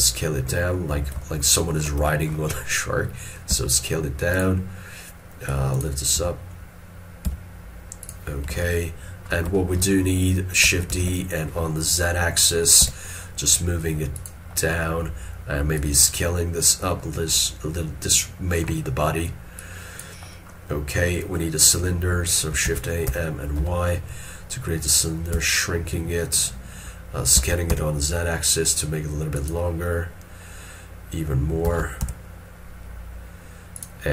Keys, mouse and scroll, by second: 1.3 ctrl+middle click, 2.2 shift+middle click, 3.6 s, 8.7 ctrl+middle click, 9.7 shift+middle click, 11.0 shift+d, 12.9 z, 14.7 middle click, 18.8 scroll down 1, 22.6 middle click, 22.8 shift+a, 23.2 m, 31.7 s.